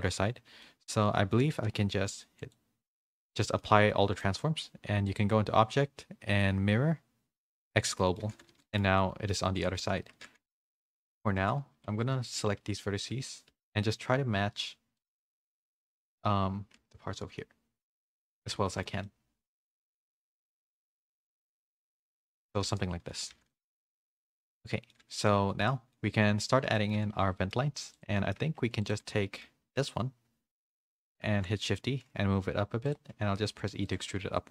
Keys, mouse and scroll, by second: 0.6 middle click, 1.5 ctrl+a, 2.9 middle click, 3.4 middle click, 5.1-7.5 drag, 8.0 scroll up 1, 8.1 middle click, 8.2 a, 8.6 middle click, 9.0 middle click, 9.5 click, 10.0 Tab, 10.2-12.3 typing, 10.7 ctrl+KP_1, 10.7 ctrl+KP_3, 14.4 z, 15.8 middle click, 15.8 z, 16.7 g, 18.7 shift+middle click, 19.2 middle click, 20.2 z, 20.4 1, 20.9 z, 21.2 g, 22.2 Tab, 22.5-25.2 typing, 22.8 middle click, 23.5 middle click, 24.4 shift+middle click, 24.7 middle click, 25.6 middle click, 26.7 middle click, 27.3 middle click, 27.3 a, 28.1 middle click, 28.3 Tab, 28.6 3, 28.8 click, 29.2 shift+middle click, 31.2 shift+d, 33.1 e, 34.2 3.